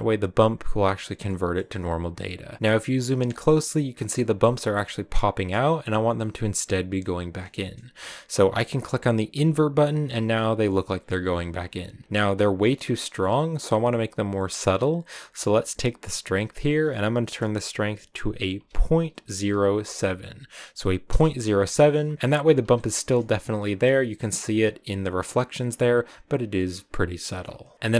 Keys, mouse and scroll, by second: 1.1 middle click, 1.4 scroll up 2, 2.6 scroll up 7, 6.9 scroll up 1, 9.2 click, 22.1 shift+middle click, 22.9 scroll up 2, 26.5-27.2 scroll up 1, 27.2-27.7 scroll down 10, 27.7 middle click, 27.9 click.